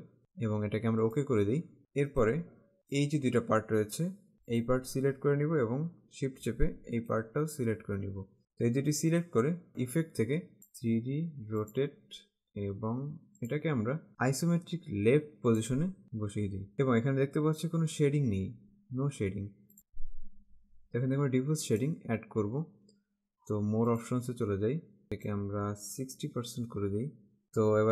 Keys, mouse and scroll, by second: 1.1 click, 2.2 click, 4.3 click, 6.4 shift+Caps_Lock, 9.8 click, 10.8 click, 13.6 click, 15.7 click, 21.8 click, 24.1 click.